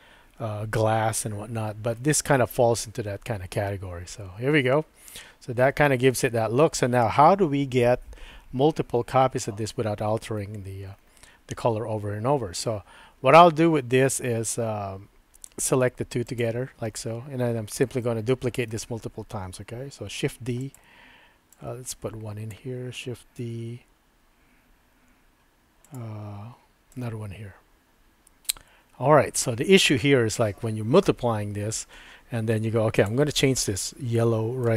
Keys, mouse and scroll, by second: 2.0-10.3 middle drag, 15.5 shift+click, 16.3 shift+click, 18.0-20.9 middle drag, 20.2 shift+d, 21.6-22.9 drag, 23.4 shift+d, 26.4 typing, 27.0-29.5 drag, 33.0 click, 34.3 shift+middle click.